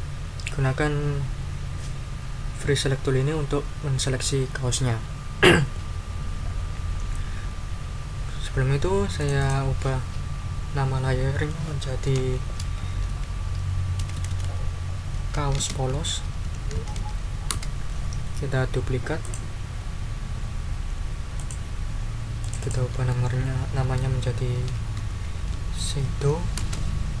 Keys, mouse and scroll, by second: 9.2 click, 12.1-17.7 typing, 19.2 click, 21.3 click, 22.4 click, 24.3-26.6 typing.